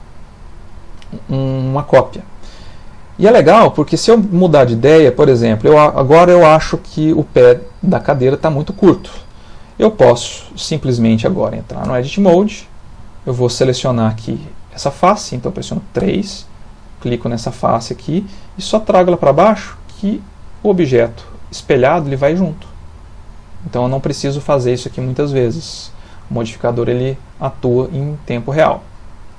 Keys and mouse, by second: 0.0 middle click, 2.2 ctrl+middle click, 2.4 ctrl+middle click, 2.8 shift+middle click, 3.4 ctrl+middle click, 10.0 ctrl+middle click, 11.9 Tab, 12.4 shift+middle click, 13.0 middle click, 16.0 3, 16.8 click, 17.7 middle click, 19.5 click, 22.4 click, 24.3 ctrl+middle click, 24.8 middle click, 26.4 click, 27.3 middle click.